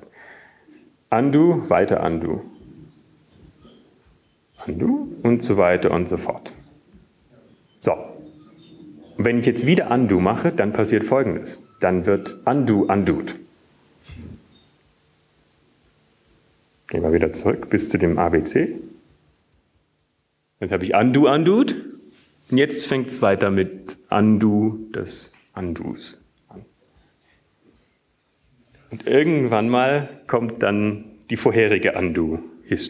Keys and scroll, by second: 4.7 ctrl+/, 6.1 ctrl+/, 6.8-7.6 ctrl+/, 8.3 ctrl+/, 9.7 ctrl+/, 13.3 Up, 18.1 ctrl+/, 19.1 ctrl+/, 20.7 ctrl+/, 21.7 ctrl+/, 26.9 ctrl+/.